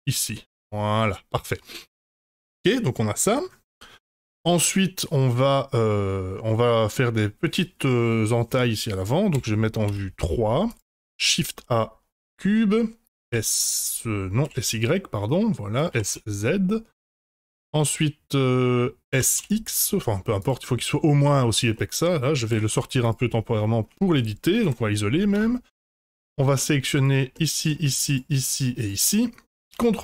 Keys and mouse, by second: 0.6-1.9 middle drag, 2.1-6.2 middle drag, 7.8 middle click, 9.3 KP_1, 9.8 KP_3, 10.9 shift+a, 13.0 s, 15.9 s, 17.3-17.7 middle drag, 19.1 s, 20.6-21.1 middle drag, 21.7-22.0 middle drag, 22.5 g, 23.6 shift+middle click, 24.6 KP_Divide, 25.3 Tab, 26.0 2, 26.2 click, 27.3 middle click, 28.0 shift+click, 28.8 shift+click, 29.2 middle click, 29.7 ctrl+b.